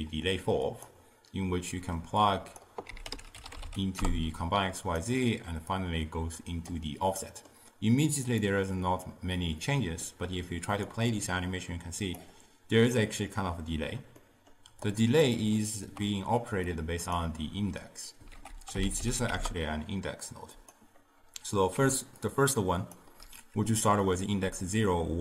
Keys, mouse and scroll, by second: 2.3-5.0 drag, 5.8-7.3 drag, 7.3-8.3 middle drag, 8.3 click, 9.7-10.9 middle drag, 10.9-14.0 drag, 14.3 middle click, 15.0 click, 15.6-16.8 ctrl+middle drag, 16.8-18.4 drag, 18.4 ctrl+a, 21.8 d, 22.3-23.0 drag, 23.0 d.